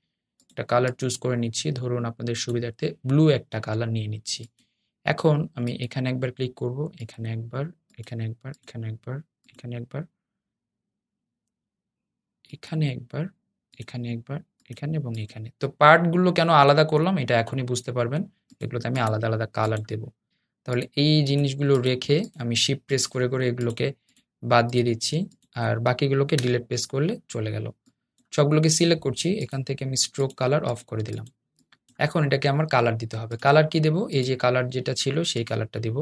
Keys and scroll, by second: 27.1 BackSpace.